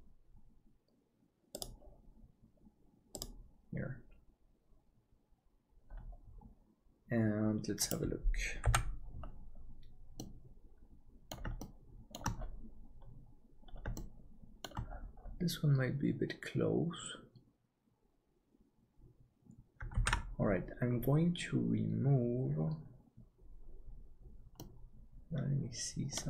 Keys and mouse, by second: 8.7 h, 10.2-11.3 middle drag, 11.6 middle click, 14.0 shift+middle click, 20.2 ctrl+s, 24.6-26.2 middle drag.